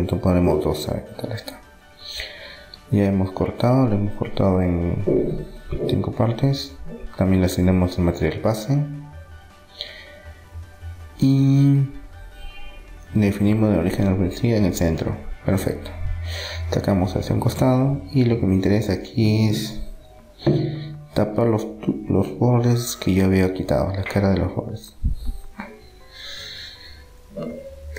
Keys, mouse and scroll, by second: 0.3-2.2 drag, 1.0 Tab, 2.2 Tab, 2.2 middle click, 2.9 middle click, 5.0-6.2 middle drag, 6.2-9.2 drag, 9.2-10.4 middle drag, 13.3-14.9 drag, 15.9-17.6 drag, 17.0 Tab, 17.6 middle click, 19.5 middle click, 19.6 middle click, 20.9-23.1 middle drag, 22.0 click, 22.9-26.6 right drag, 26.2 e, 27.2 s.